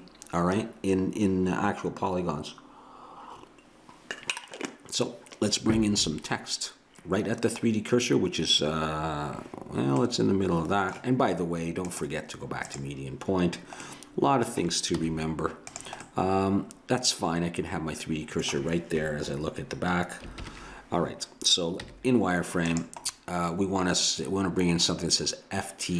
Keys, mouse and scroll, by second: 9.0-11.7 middle drag, 11.9-13.8 drag, 13.9 middle click, 15.0 z, 20.4 ctrl+KP_1, 21.8 z.